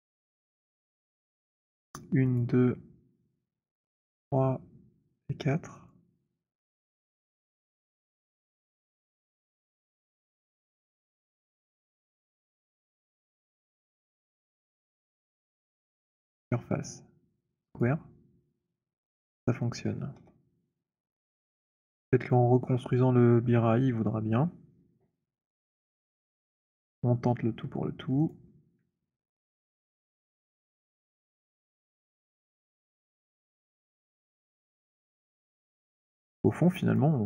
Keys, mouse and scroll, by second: 2.3 alt+click, 2.6 shift+click, 3.4 shift+click, 4.0 shift+click, 5.2 shift+click, 6.0 click, 7.1 alt+click, 8.3 alt+middle click, 12.0 alt+right click, 12.7 alt+middle click, 12.7 alt+click, 13.9 alt+click, 16.3 click, 17.7 click, 20.2 z, 22.5 middle click, 25.8 middle click, 26.0 middle click, 26.6 alt+click, 28.0 click, 29.0 alt+middle click, 29.7 alt+click, 31.3 alt+right click, 32.0 click, 33.2 click, 33.9 alt+middle click, 36.1 alt+click, 36.6 alt+middle click, 36.9 alt+click.